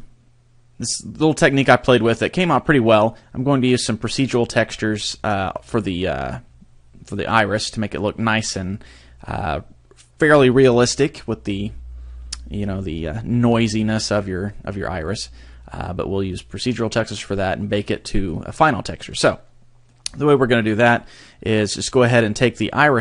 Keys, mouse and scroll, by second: 19.2 middle click, 20.1-20.8 scroll up 2, 20.8-21.9 scroll up 1, 21.9 right click.